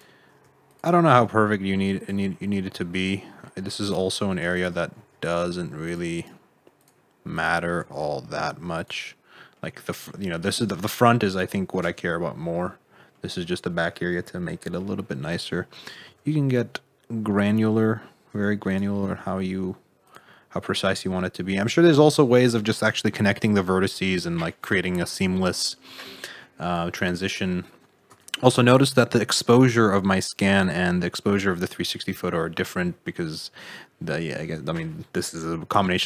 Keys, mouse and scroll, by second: 0.6 shift+click, 1.0 g, 2.2 middle click, 3.8 click, 4.5 shift+click, 4.9 g, 6.1 right click, 6.7 click, 7.3 click, 7.7 g, 9.0 middle click, 9.9 middle click, 10.3 middle click, 11.2 middle click, 13.2 middle click, 15.2 click, 15.9 g, 18.4 1, 18.6 click, 19.0 g, 20.2 middle click, 21.5-21.8 scroll down 6, 21.8 middle click, 22.2-22.6 scroll up 4, 22.6 middle click, 24.0 middle click, 25.2 middle click, 25.8 scroll up 1, 26.1 shift+middle click, 26.7 `, 28.1 Tab, 28.4 middle click, 29.6 click, 30.5 click, 30.9 middle click, 31.6 scroll down 2, 31.8 middle click, 32.2-32.5 scroll up 2, 32.5 middle click, 34.5 middle click.